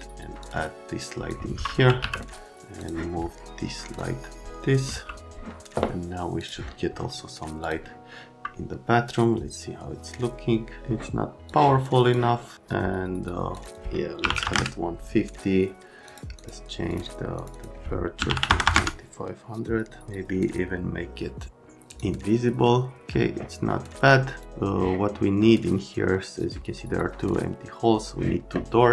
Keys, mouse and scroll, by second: 0.4 click, 1.5-2.5 typing, 2.8 click, 3.9 click, 4.8 c, 6.4 click, 7.6 click, 11.4 click, 13.5 click, 14.2 KP_1, 14.3 KP_5, 14.3 KP_6, 14.4 KP_0, 14.5 KP_Enter, 16.1 click, 16.4 click, 16.9 click, 17.4 click, 17.5 click, 18.2 KP_3, 18.3 KP_5, 18.5 KP_0, 18.6 KP_0, 18.7 KP_Enter, 21.9 click, 24.3 click.